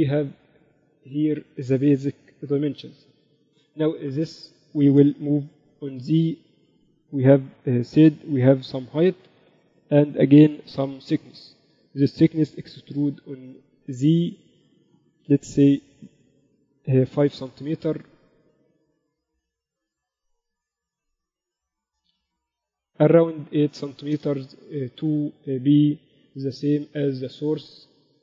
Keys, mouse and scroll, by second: 3.4 KP_1, 5.9 g, 11.5 Tab, 12.0 a, 12.2 a, 12.9 e.